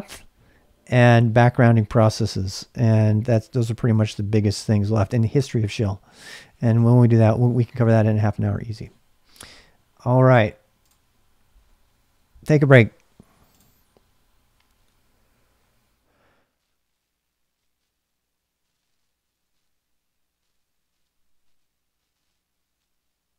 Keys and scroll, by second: 0.2-7.9 typing, 17.6 ctrl+alt+i.